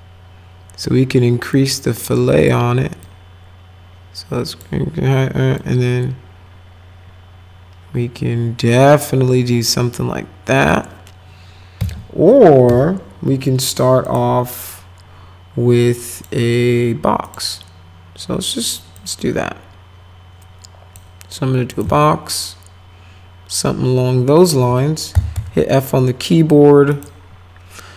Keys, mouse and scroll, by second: 1.5 click, 3.0-4.6 drag, 5.6-10.7 drag, 12.7 Delete, 14.1 click, 16.1 click, 17.2 click, 18.9-21.0 drag, 21.7 click, 22.0-24.5 alt+middle drag, 24.9-25.9 typing, 25.7 middle click, 26.9 click.